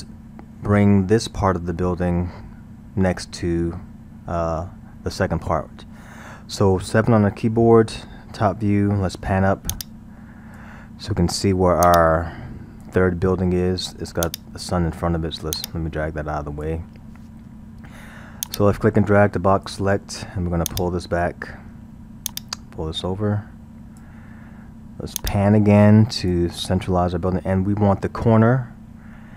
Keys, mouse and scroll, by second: 7.4 KP_7, 9.7-14.4 drag, 15.6-18.6 drag, 20.7-28.2 drag, 28.5-29.2 scroll, 29.2-29.3 middle drag.